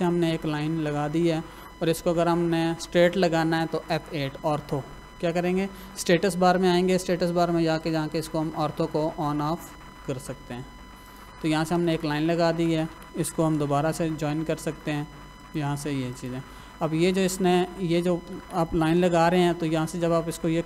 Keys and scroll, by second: 11.5 Escape, 13.4 l, 13.7 space, 17.1 Escape, 18.9 l, 19.0 space.